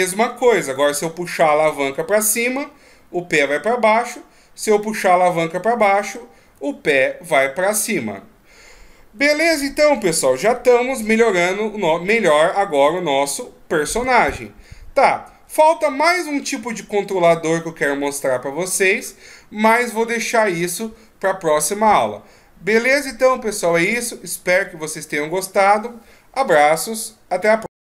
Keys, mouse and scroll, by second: 0.6 right click, 1.8 r, 6.9 middle click, 8.1-9.2 scroll down 2, 9.2 a, 9.4 a, 10.6 alt+r, 10.9 alt+g, 11.5-12.1 scroll down 1, 12.1 middle click, 13.1-14.1 shift+scroll up 1, 14.6 ctrl+scroll down 1, 15.1 ctrl+scroll up 1, 16.1 middle click.